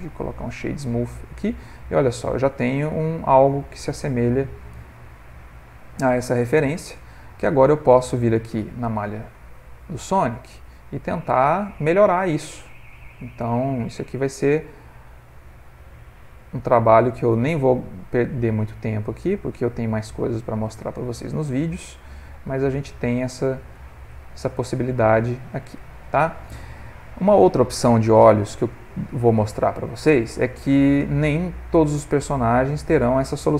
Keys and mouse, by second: 0.1 ctrl+middle click, 0.5 middle click, 2.7 middle click, 5.0 ctrl+middle click, 5.9 middle click, 6.3 ctrl+middle click, 7.0 click, 7.5 click, 8.0 Tab, 8.6 Tab, 9.0 click, 9.9 Tab, 11.7 click, 12.2 click, 13.0 g, 17.8 click, 18.2 g, 21.0 click, 21.9 g, 24.5 Tab, 24.8 ctrl+middle click, 25.4 middle click, 26.4 ctrl+middle click, 26.7 middle click, 28.3 ctrl+middle click, 28.7 middle click, 31.2 middle click, 31.5 ctrl+middle click, 32.1 middle click, 33.0 middle click.